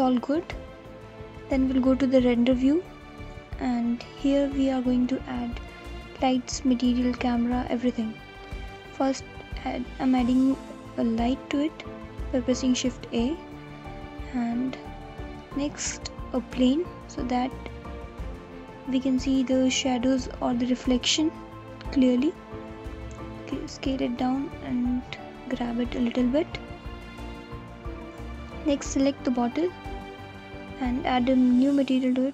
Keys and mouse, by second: 1.2-3.1 alt+middle drag, 3.1 alt+click, 8.8 g, 9.3 z, 10.6 r, 13.7 shift+a, 18.7 click, 19.1 s, 21.2 click, 21.9 g, 22.3 z, 25.4 alt+click, 26.4 click, 26.4 alt+middle click, 28.3 click, 31.7 click.